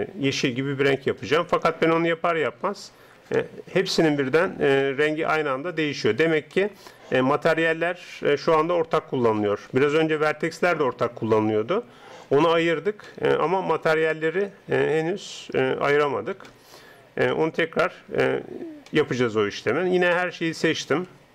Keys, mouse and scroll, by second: 3.3-5.3 middle drag, 5.6-8.5 middle drag, 9.9-11.1 middle drag, 12.3-14.9 middle drag, 16.5-20.7 middle drag, 20.7 a, 21.1 a.